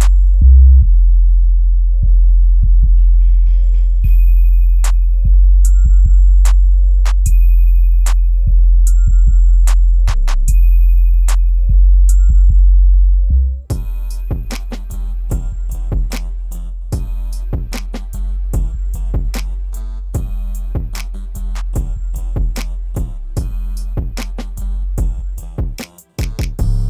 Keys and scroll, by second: 20.6 shift+Return.